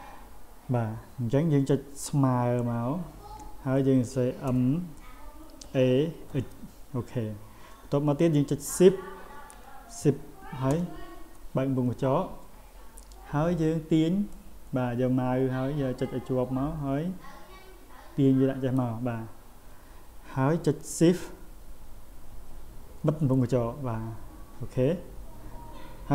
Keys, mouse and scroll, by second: 5.6 a, 6.3 x, 14.3-18.8 drag.